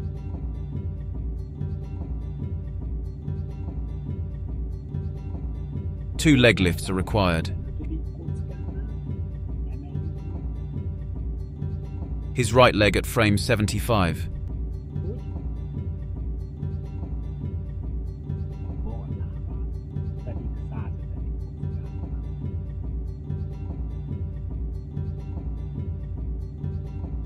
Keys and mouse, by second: 10.8-18.2 drag, 20.4-27.2 drag.